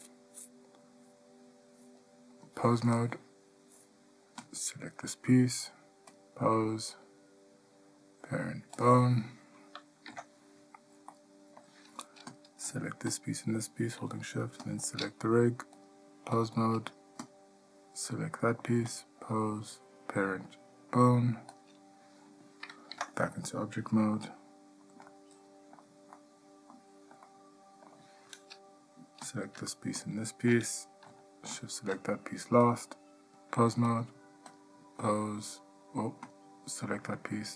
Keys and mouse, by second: 2.6-3.2 drag, 6.4-9.0 drag, 10.3 Tab, 11.3-11.8 middle drag, 12.5 click, 16.0-16.6 drag, 19.2-21.8 drag, 23.1 Tab, 24.3-25.0 middle drag, 25.4-26.0 shift+middle drag, 26.3-26.9 middle drag, 27.4-28.1 ctrl+middle drag, 31.7 shift+click, 32.9-34.1 drag, 34.8-35.9 drag.